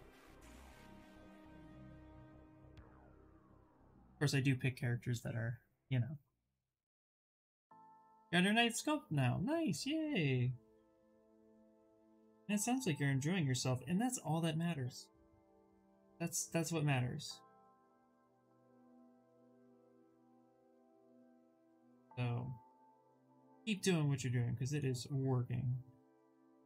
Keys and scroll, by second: 8.6 q, 14.8 b, 15.2 v, 15.7 s.